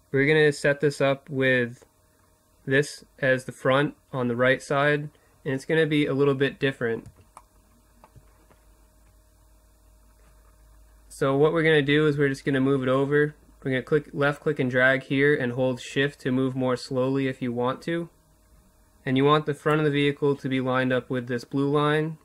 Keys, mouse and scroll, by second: 4.9-6.1 middle drag, 6.3 middle click, 12.8-14.6 drag, 21.9 middle click.